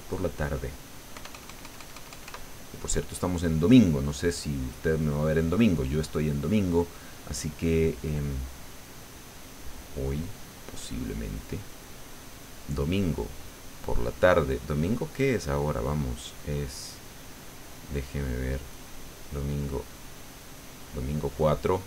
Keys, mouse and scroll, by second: 1.1 KP_Add, 4.0 click, 7.9 click, 9.0 click, 9.7 click, 10.3 click, 10.8 click, 11.5 click, 12.4-13.4 drag, 14.2 click, 15.9 click, 17.2 click, 17.9 click, 19.9 click, 21.0 click.